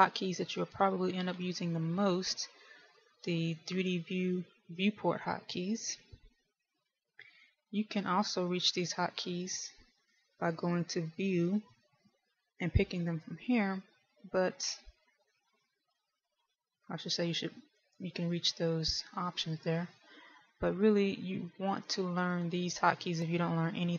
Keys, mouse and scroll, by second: 6.9 middle click, 9.5 KP_1, 10.9 click, 16.1 shift+middle click, 17.8 click, 19.4 click.